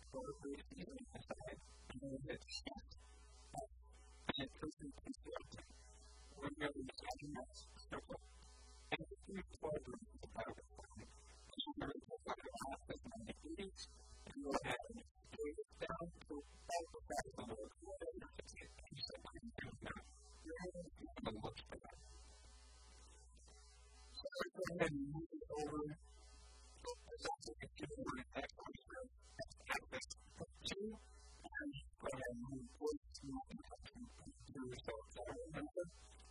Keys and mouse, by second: 0.2-2.6 middle drag, 2.6 right click, 2.6 shift+s, 6.4-8.4 drag, 8.4-9.5 middle drag, 11.8 r, 14.2 s, 15.0 KP_1, 15.3 KP_3, 15.8 s, 18.4 s, 21.0-23.2 drag, 21.0 s, 22.4 KP_1, 24.6 g, 27.2-28.7 drag, 27.2 e, 31.2 a, 32.3 g, 35.0 a.